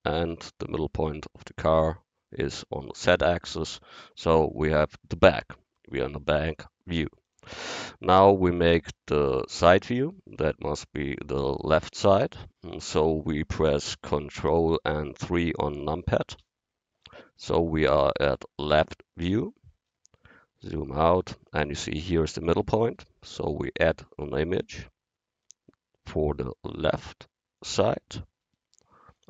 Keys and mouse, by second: 7.3-9.2 drag, 10.1-16.4 middle drag, 16.4 ctrl+KP_3, 23.7-27.4 drag, 29.2 click.